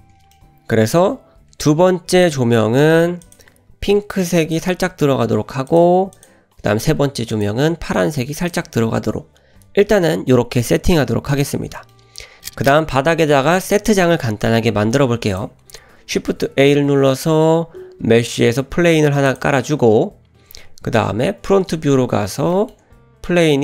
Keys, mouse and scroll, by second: 0.9 click, 2.2 click, 3.3 click, 5.7 click, 6.2 click, 7.3 click, 11.3 click, 11.8 shift+middle click, 16.2 shift+a, 20.3-20.9 scroll down 1, 20.9 `, 21.6-22.4 scroll up 4, 22.5 shift+middle drag, 23.0-23.3 scroll up 1, 23.3 g.